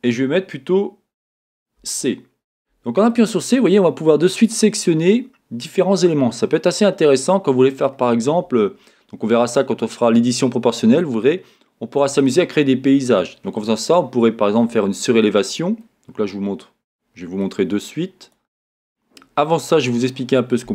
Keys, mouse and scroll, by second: 1.8 c.